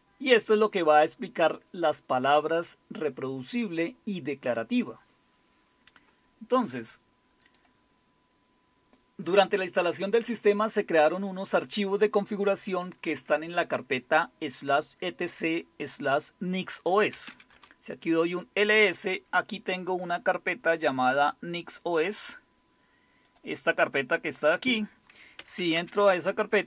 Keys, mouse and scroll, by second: 2.3-5.4 typing, 7.5 click, 7.5 typing, 8.0-9.3 scroll down 1, 13.8 typing, 17.0-17.8 typing, 22.2-23.3 drag, 23.8 click, 24.9 click, 25.3-26.6 typing.